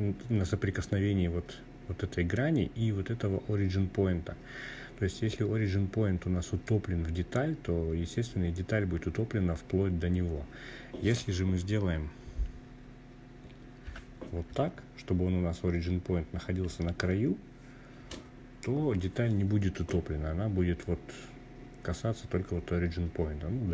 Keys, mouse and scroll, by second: 12.6 g, 13.2 Up, 13.7 Up, 13.8 Up, 14.0 Up, 14.2-14.8 Up, 15.4 Up, 16.7 Return.